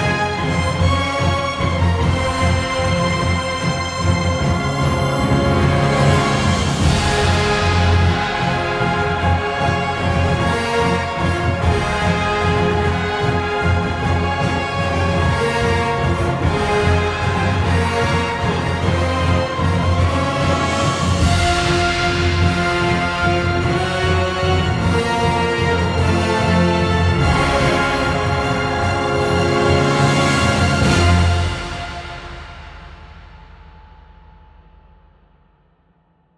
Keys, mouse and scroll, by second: 4.2 [, 4.3 ctrl+z, 9.5 z, 9.7 click, 10.1 ctrl+s, 10.7 click, 11.7 b, 14.6 e, 15.8 ctrl+z, 16.4 ctrl+z, 17.1 ctrl+z, 35.1 ctrl+z.